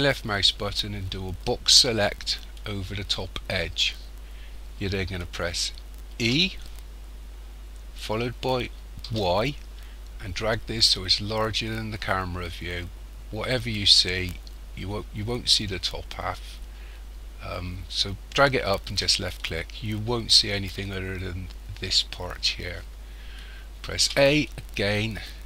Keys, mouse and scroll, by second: 6.2 e, 24.0 a.